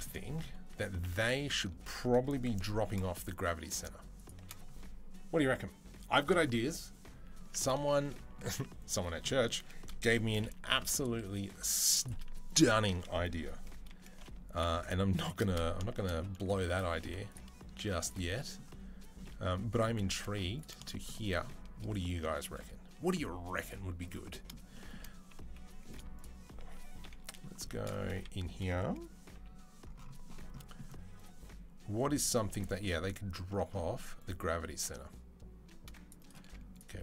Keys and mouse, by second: 0.5 2, 0.9 click, 1.0-10.7 middle drag, 2.4 g, 10.1 g, 12.3 alt+click, 13.7 g, 15.1-17.8 shift+middle drag, 17.2 alt+3, 17.8 alt+shift+click, 18.1-26.0 shift+middle drag, 20.1 z, 26.0 shift+click, 26.0-37.0 shift+middle drag, 26.8 KP_3, 29.1 c, 36.2 z, 36.9 z.